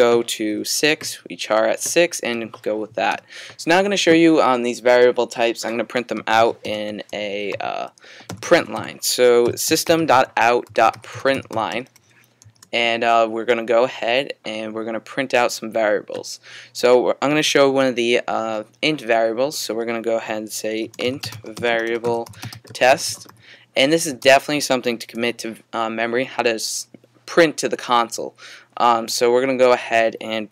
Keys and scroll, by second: 0.5-1.3 typing, 6.4-13.4 typing, 20.6-23.8 typing, 24.9-25.6 typing.